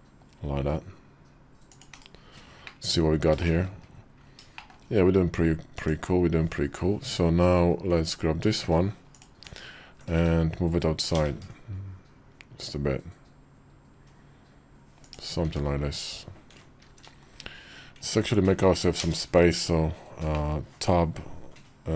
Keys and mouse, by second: 1.7 /, 2.4 middle click, 3.5 KP_5, 4.3 shift+middle click, 5.5 click, 6.8 Tab, 10.9 ctrl+b, 15.2 Tab, 16.7 shift+2, 18.8 ctrl+space, 20.2 middle click.